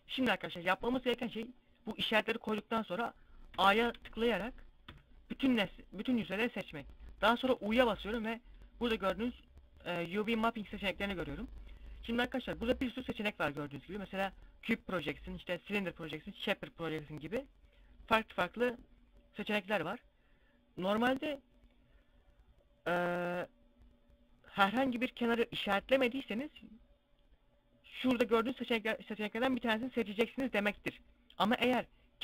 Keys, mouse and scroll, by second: 3.1 a, 3.4 a, 4.5 u, 7.0 u.